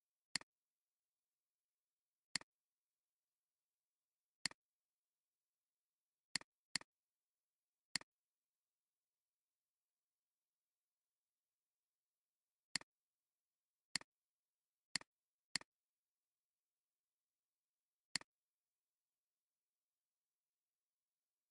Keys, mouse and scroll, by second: 1.5 ctrl+2, 4.4 alt+shift+click, 6.7 double click, 12.7 double click, 13.3 alt+scroll up 1, 13.8 space, 14.4 alt+scroll down 2.